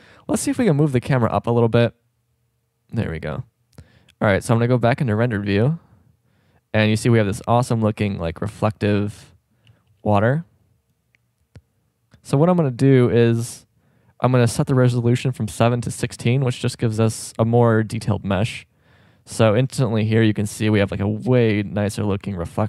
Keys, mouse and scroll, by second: 0.2 g, 4.4 click, 8.1 shift+scroll up 1, 9.8 shift+b, 14.9-17.0 drag, 21.3 shift+b.